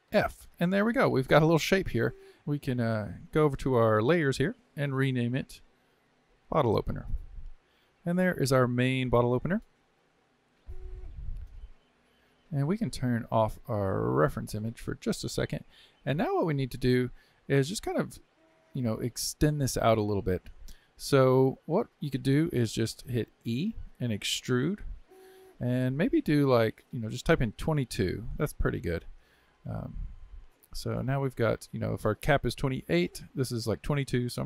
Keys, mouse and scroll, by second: 0.1 f, 1.0-2.4 middle drag, 2.4 click, 3.1 click, 3.3 click, 4.5 click, 4.6-6.4 drag, 14.3 click, 15.2-18.2 middle drag, 29.5-32.5 middle drag.